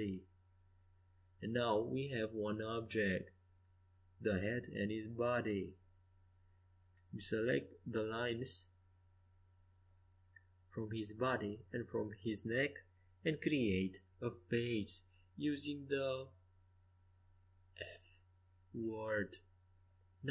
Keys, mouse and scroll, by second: 1.8-3.2 right drag, 2.8 g, 3.2 click, 6.4 middle click, 6.6 middle click, 7.1 Tab, 14.5 middle click.